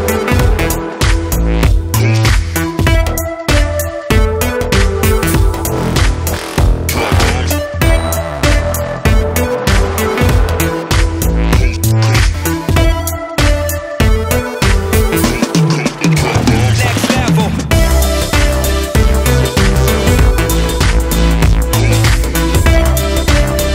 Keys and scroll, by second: 9.2 ctrl+space, 9.8 ctrl+space.